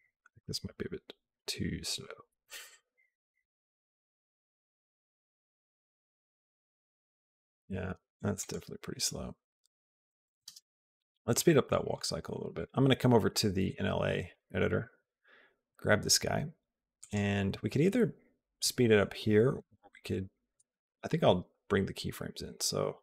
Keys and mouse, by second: 10.3 space, 11.2 click, 12.4 click, 14.1 click, 14.5 click, 16.8 click, 20.6 Tab.